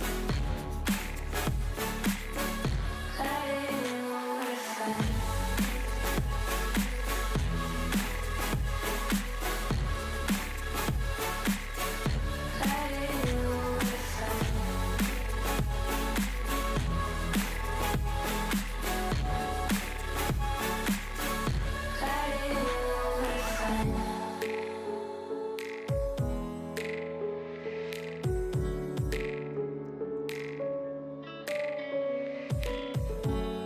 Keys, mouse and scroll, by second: 0.4-1.7 middle drag, 1.7 KP_3, 2.0 g, 3.0 click, 3.4-4.1 middle drag, 4.1 KP_1, 4.5-5.1 scroll up 3, 5.1-5.7 shift+middle drag, 5.7 a, 6.2 s, 7.3 click, 8.0 KP_3, 8.7 a, 8.9 scroll down 3, 9.0 shift+middle click, 9.4 shift+d, 12.4 KP_1, 12.9 shift+middle click, 13.1 g, 14.7-15.8 middle drag, 15.8 drag, 16.0 Tab, 16.2 drag, 16.5 alt+z, 16.8-18.0 middle drag, 18.0 click, 19.0 click, 19.5 click, 20.1 click, 20.4 click, 20.6-22.1 drag, 22.2-22.6 drag, 23.2 click, 24.1-25.5 middle drag, 28.2-29.6 scroll down 1, 31.5-33.1 middle drag, 33.1-33.6 drag.